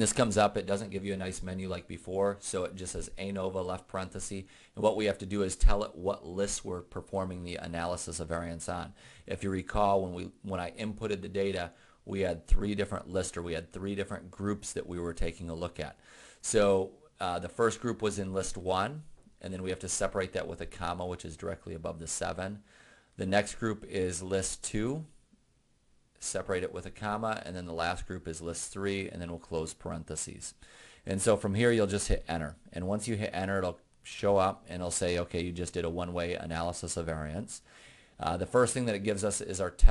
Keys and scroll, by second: 18.8 1, 21.2 ,, 24.9 2, 26.8 ,, 28.7 3, 29.4 ), 32.2 Return.